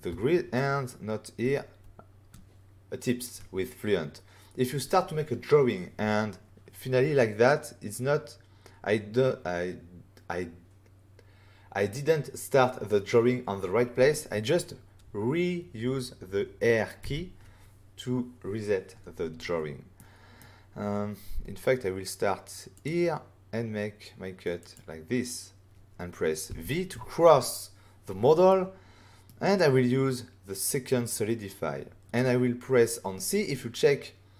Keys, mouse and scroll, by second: 17.0 r, 19.9 middle click, 22.7 click, 24.6 click, 26.4 v, 28.4 middle click, 29.5 click.